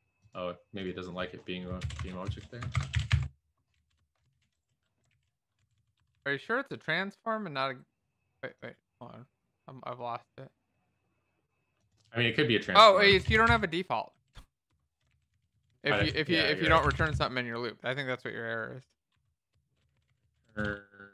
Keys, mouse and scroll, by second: 2.1-3.6 typing, 2.2 Left, 3.7 Down, 4.3 alt+shift+f, 5.6 ctrl+s, 5.6 Down, 5.7 Down, 6.1 Up, 13.1-14.8 typing, 15.3 ctrl+s, 15.3 Down, 15.5 Down, 15.6 Down, 15.8 Down, 16.7 ctrl+z, 18.2 ctrl+s, 18.4 Down, 18.6 Down, 18.7 Down, 19.1 Down, 20.6-21.1 typing.